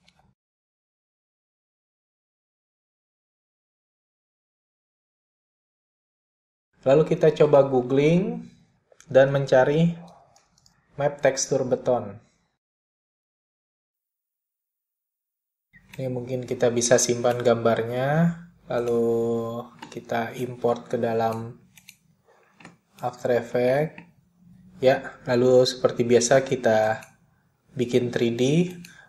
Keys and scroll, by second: 0.1 /, 1.6 p, 9.5-14.2 typing.